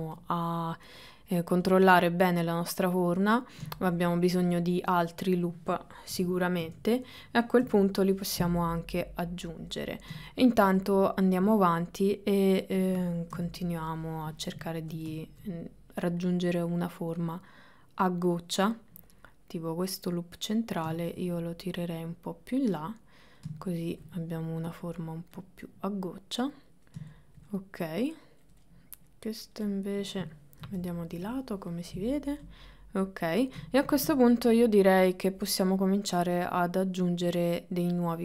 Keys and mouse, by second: 0.2 click, 1.7-2.9 drag, 3.2 middle click, 4.5 click, 5.1 middle click, 6.2 KP_1, 6.7 KP_2, 8.7 click, 8.7 KP_3, 11.4-12.9 middle drag, 13.4 KP_1, 14.9 ctrl+middle click, 15.4 middle click, 16.3 click, 17.3-18.4 drag, 19.1-20.9 drag, 21.3 shift+middle click, 21.9-23.4 drag, 23.7 shift+middle click, 24.7 click, 25.4-26.7 drag, 27.3 shift+middle click, 27.5 middle click, 28.7 middle click, 29.7 middle click, 30.7 KP_1, 31.2 KP_3, 32.5 click, 33.8 ctrl+middle click, 34.3-38.2 shift+middle drag.